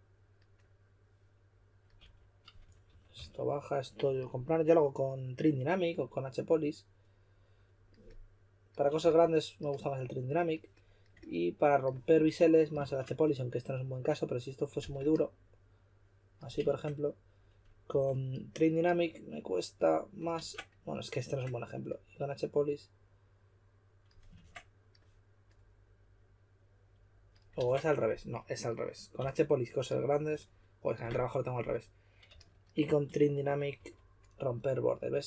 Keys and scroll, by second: 1.9-3.1 typing, 9.0 typing, 12.1 s, 12.8 shift+5, 14.7 4, 16.6 shift+5, 17.8 5, 20.3 super+z, 21.2 shift+5, 24.3 super+z, 27.5 super+z, 29.1 s, 30.3 typing, 32.3-33.7 typing.